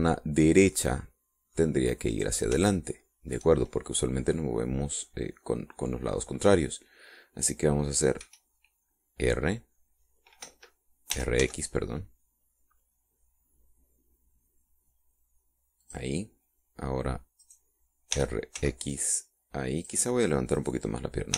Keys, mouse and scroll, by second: 3.1 right click, 3.7 shift+middle click, 9.2 r, 11.4 Escape, 12.1 r, 12.4 x, 16.8 click, 18.4 right click, 19.1 r, 19.6 x, 20.8 click.